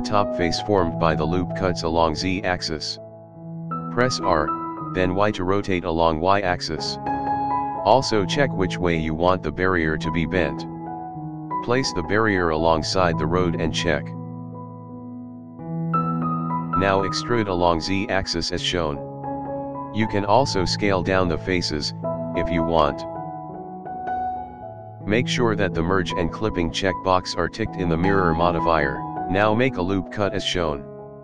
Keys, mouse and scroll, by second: 0.6 e, 3.0 scroll up 1, 3.2 shift+middle click, 3.5-4.4 scroll up 1, 4.5 r, 7.4 scroll down 2, 7.7 scroll up 1, 7.8 middle click, 12.9-13.2 scroll down 2, 13.2-13.8 scroll up 3, 13.8-14.9 middle drag, 17.9 e, 21.4 s, 24.2-24.5 scroll down 2, 24.4-25.7 scroll up 2, 24.5-27.4 middle drag, 28.1 click, 28.7 middle click, 29.1 ctrl+r.